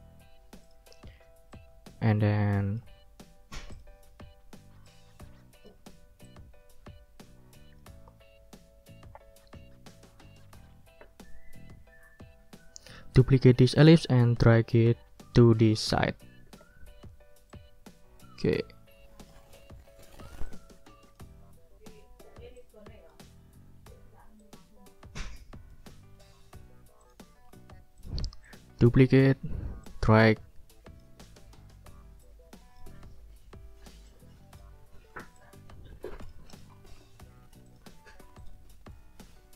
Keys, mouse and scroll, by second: 0.6 click, 1.0 click, 1.5-2.9 drag, 3.7 ctrl+scroll up 1, 4.9 ctrl+scroll up 1, 5.0 ctrl+click, 6.2-13.2 drag, 14.5-15.9 drag, 16.5 ctrl+d, 17.5-19.5 drag, 20.4 ctrl+click, 22.6 ctrl+click, 23.8 ctrl+scroll up 1, 24.4-25.9 ctrl+drag, 26.2 ctrl+click, 26.7 ctrl+scroll down 2, 27.0 ctrl+click, 27.3 ctrl+click, 27.9 click, 28.4 shift+click, 29.3 ctrl+d, 29.8-31.2 ctrl+drag, 32.2 ctrl+click, 34.1 click, 34.9 ctrl+scroll up 2, 35.4-37.1 ctrl+drag, 37.7 ctrl+click, 37.9 ctrl+scroll up 2, 38.4 ctrl+click.